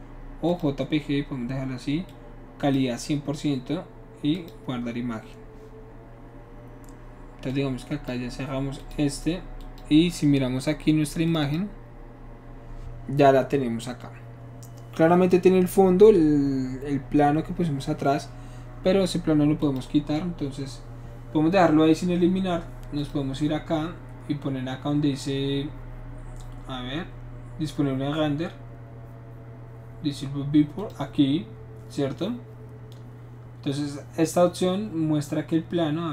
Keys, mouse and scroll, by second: 0.4 click, 2.1 click, 4.3 click, 7.5-8.1 drag, 8.8 click, 9.6 click, 11.3 click, 11.4 click, 19.6 click, 23.0 click, 30.8 click.